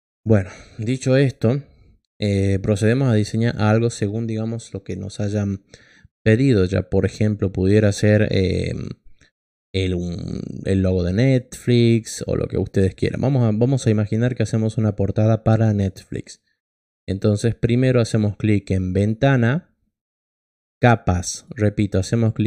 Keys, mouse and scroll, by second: 18.9 click, 22.4 click.